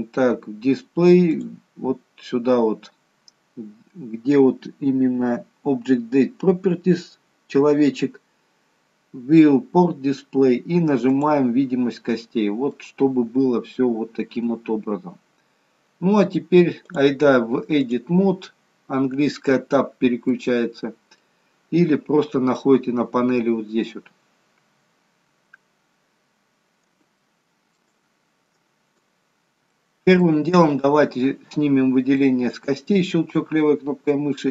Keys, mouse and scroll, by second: 1.4 click, 11.2 click, 12.3 scroll up 1, 12.7 middle click, 14.8-15.4 scroll down 1, 15.4-15.8 scroll down 1, 16.9 click, 20.2 middle click, 27.2 shift+middle click, 27.2-27.9 shift+scroll up 1, 28.0-28.6 scroll up 2, 28.6-29.0 scroll up 4, 29.1-29.7 scroll down 3, 29.7 shift+middle click, 30.7 click, 32.2 middle click.